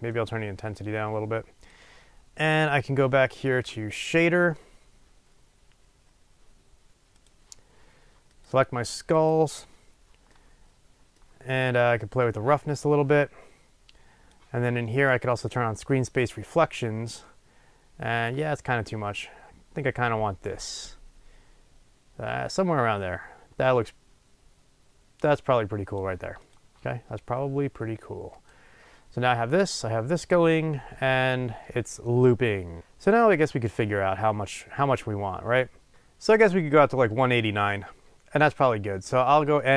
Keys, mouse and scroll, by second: 0.2-8.5 drag, 9.1 click, 11.9-15.5 drag, 17.3-28.5 drag, 29.7-35.3 drag.